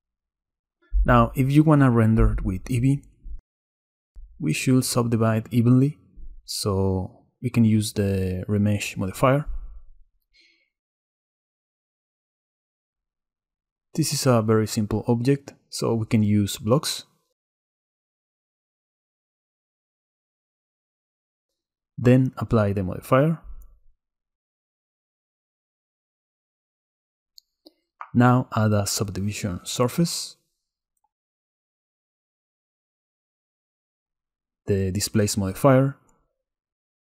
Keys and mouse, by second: 0.5-1.7 right drag, 3.7 right click, 5.1-8.1 right drag, 12.1 click, 13.0 middle click, 14.2 middle click, 16.0 middle click, 22.1 middle click, 24.0-25.3 drag, 25.4 Tab, 25.8 a, 26.4 Tab, 27.6-32.8 drag, 34.2-37.0 drag.